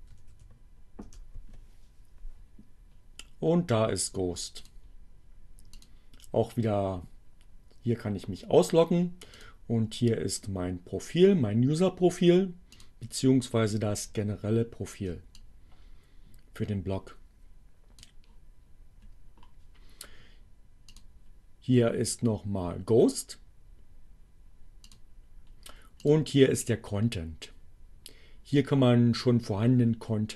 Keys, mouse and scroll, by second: 1.1 Return, 4.7 click, 5.9 click, 9.4 click, 12.7 click, 15.2-18.2 drag, 20.8 click, 24.4 click, 26.0 click.